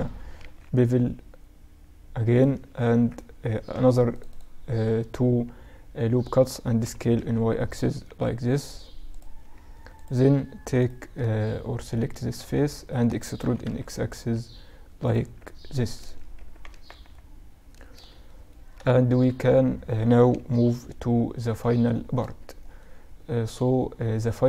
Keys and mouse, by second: 2.3 ctrl+r, 6.3 s, 9.4-11.2 drag, 10.2-12.1 right drag, 11.4-14.4 middle drag, 12.8 e, 14.6 z, 15.1 z, 15.4 z, 15.8 z, 16.1 Tab, 16.6-19.6 middle drag, 19.8 KP_Subtract, 22.2-24.3 middle drag.